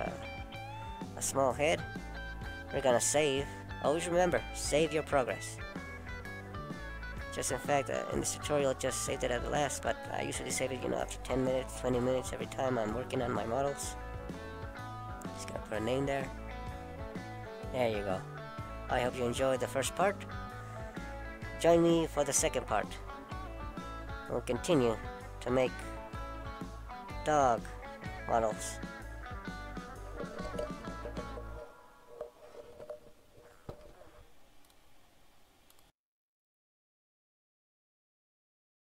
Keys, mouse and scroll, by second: 8.5 click, 9.1 middle click, 29.4 click, 29.4 click, 30.2 scroll down 1, 30.3 middle click, 32.9-33.4 scroll down 2, 33.4 scroll up 2, 34.1 middle click, 35.2 scroll up 1.